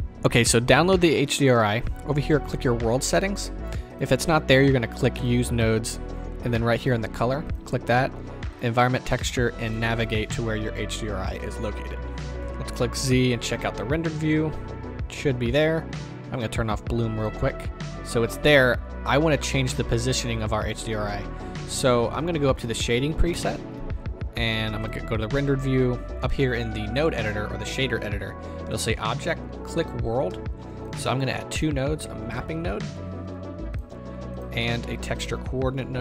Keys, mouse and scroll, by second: 3.9-5.2 drag, 8.6-9.8 drag, 12.4 click, 14.7 z, 17.2 click, 22.6 click, 23.3 KP_0, 23.9-24.9 scroll up 1, 24.9 z, 30.7 ctrl+z.